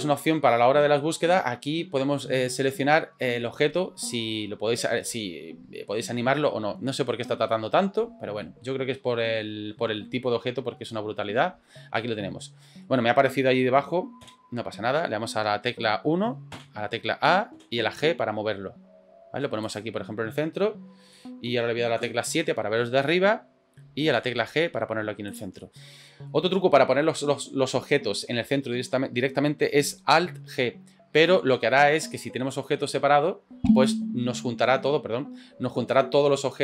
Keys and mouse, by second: 12.0-12.9 middle drag, 21.1-21.5 middle drag, 25.6-26.3 middle drag.